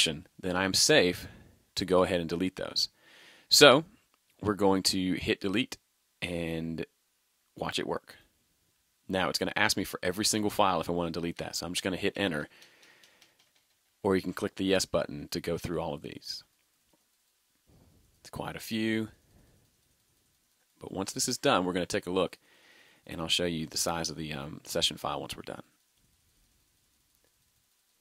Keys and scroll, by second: 11.4 Return.